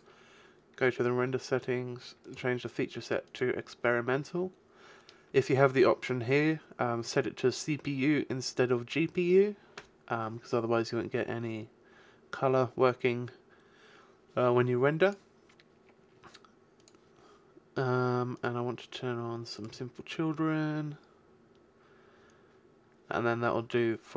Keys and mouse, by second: 0.4 click, 15.1-18.6 drag, 18.6-19.9 middle drag, 22.0 middle click, 23.5 middle click, 23.9 middle click, 24.0 middle click.